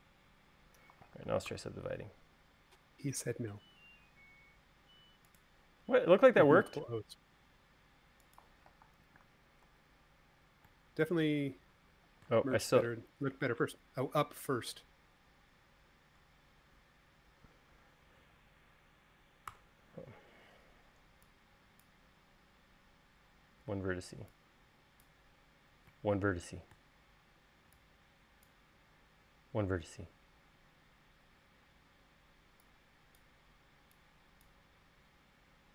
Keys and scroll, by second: 2.0 u, 7.0 space, 9.8 space, 10.2 super+z, 20.1 v.